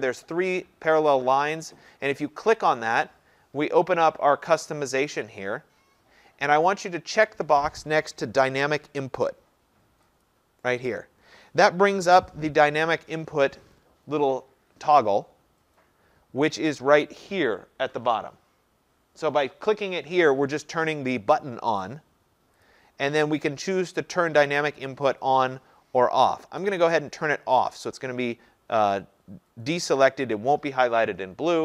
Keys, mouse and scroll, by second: 2.8-5.5 drag, 6.0-7.9 drag, 10.3-15.3 drag, 22.7 click, 26.8 click.